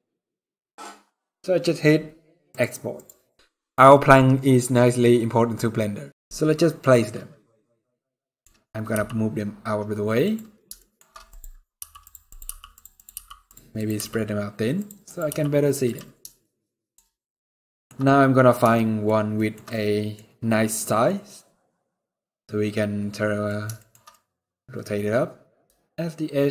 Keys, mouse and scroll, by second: 6.5 scroll down 1, 6.7 middle click, 7.5 scroll down 2, 7.8 middle click, 8.6 g, 10.3 scroll down 1, 11.0 click, 11.5 g, 12.0 click, 12.1 g, 12.6 click, 12.8 g, 13.4 click, 13.6 g, 14.7 click, 14.9 g, 16.1 shift+middle click, 17.7-18.3 scroll up 4, 18.4 shift+middle click, 19.4 middle click, 20.7 middle click, 23.4 shift+middle click, 23.6 shift+middle click, 23.8 middle click.